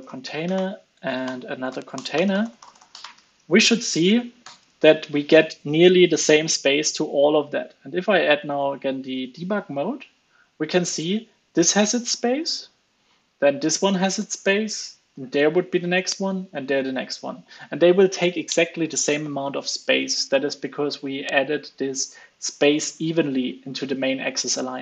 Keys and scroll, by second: 3.6 super+s, 4.4 alt+super+l, 4.7 super+s.